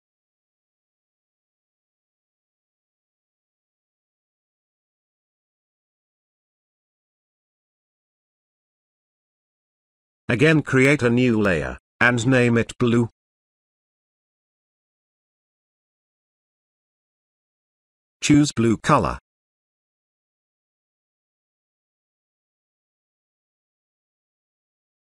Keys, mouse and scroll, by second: 5.5 space, 5.6 ctrl+click, 6.5 ctrl+click, 6.9-7.5 click, 8.0-8.6 ctrl+drag, 12.9-14.1 typing, 15.1 click, 19.2 click, 20.7-22.7 typing, 23.1 click.